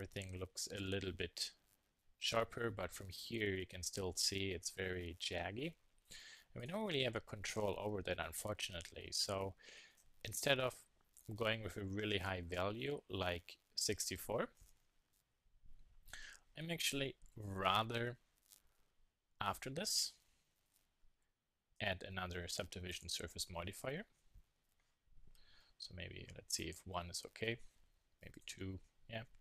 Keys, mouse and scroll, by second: 2.7-4.9 middle drag, 9.9-11.8 drag, 18.1 middle click, 19.5-20.6 middle drag, 20.6 KP_1, 20.9 KP_3, 22.8-24.7 drag, 28.9 KP_1.